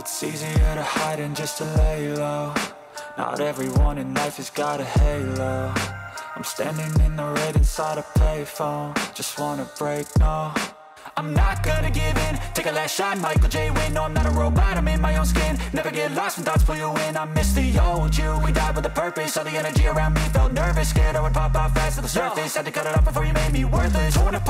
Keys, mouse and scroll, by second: 0.0 click, 0.2 middle click, 0.3 scroll up 2, 0.4 shift+middle click, 0.5 click, 1.4 shift+middle click, 1.5 middle click, 1.8 middle click, 2.2 middle click, 2.8 middle click, 3.2 click, 3.5 click, 3.8 click, 5.2-5.7 scroll down 9, 5.4 click, 5.6 click, 5.8 middle click, 6.6 click, 6.8 click, 7.3 middle click, 7.4 click, 7.4-9.0 scroll down 3, 9.0 click, 12.7-14.4 middle drag, 18.1-18.9 scroll down 5, 18.9 click, 21.1 click, 23.3-24.0 middle drag.